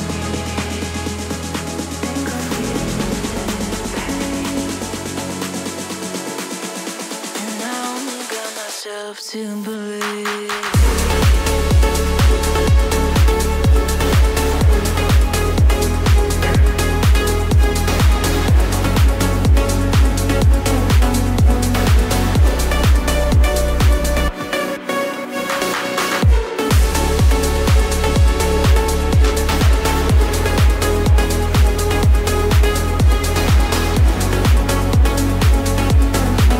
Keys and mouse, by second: 0.4-3.5 drag, 5.0 click, 5.9 drag, 9.8 click, 11.8 click, 12.2 click, 16.6 click, 19.1-20.8 drag, 21.3 click, 21.6-23.7 middle drag, 25.1-32.4 drag, 33.4 middle click, 35.8 r, 36.2 x.